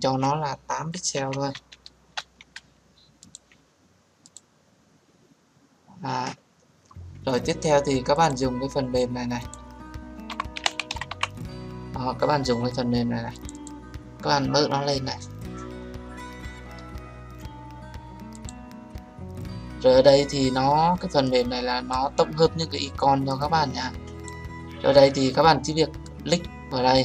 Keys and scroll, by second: 1.8 Return.